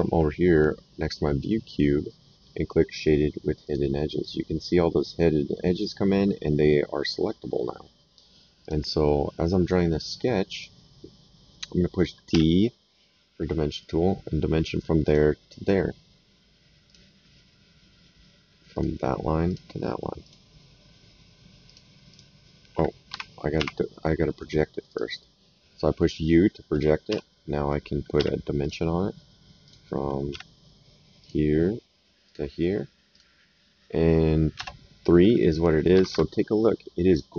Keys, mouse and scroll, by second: 3.6 click, 8.6 click, 10.5 click, 11.8 middle click, 12.3 d, 13.8 click, 15.0 click, 16.8 click, 18.7 click, 21.6 click, 23.1 Escape, 23.5 u, 24.9 click, 27.0 s, 28.1 d, 28.6 click, 29.6 click, 30.3 d, 31.2 click, 32.2 click, 34.5 KP_Enter, 35.9 Escape.